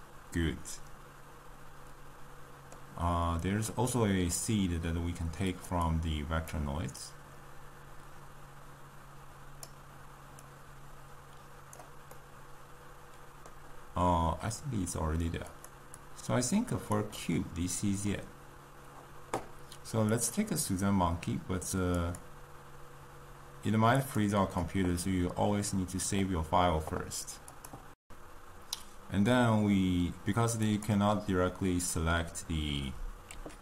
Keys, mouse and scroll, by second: 9.8 click, 10.4-18.9 drag, 18.9-20.2 middle drag, 20.2 click, 24.4 click.